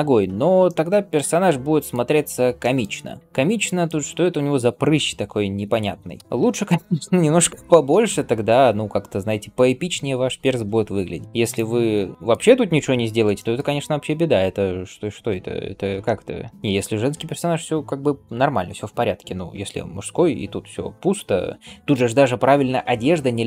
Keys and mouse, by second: 6.1 KP_3, 6.2-13.1 shift+middle drag, 7.5 g, 13.3-15.1 shift+middle drag, 16.5-23.0 middle drag.